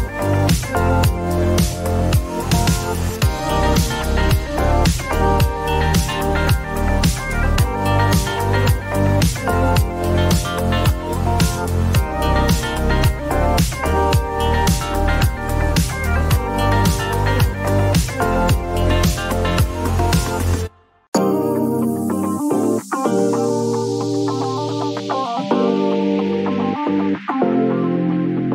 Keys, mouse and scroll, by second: 0.1-4.4 drag, 6.4-8.4 typing, 6.9 click, 9.7 Return, 13.1-14.0 scroll, 14.1 click, 15.4 click, 17.1 right click, 18.5 click, 19.1 typing, 21.0 click, 23.6 click, 25.2-27.2 typing.